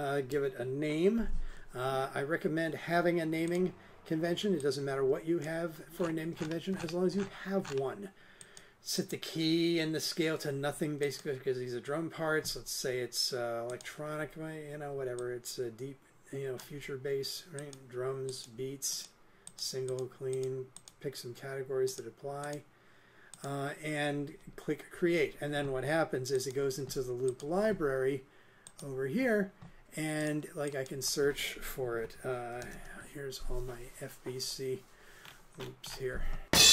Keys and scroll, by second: 32.3-33.2 typing.